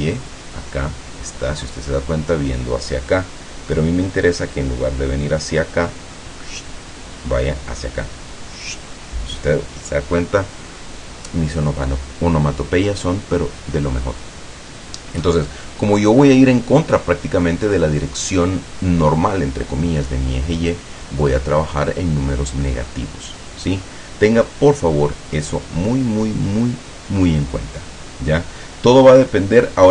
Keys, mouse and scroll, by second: 16.1-17.4 middle drag, 28.0-28.4 scroll down 1, 29.1-29.9 middle drag.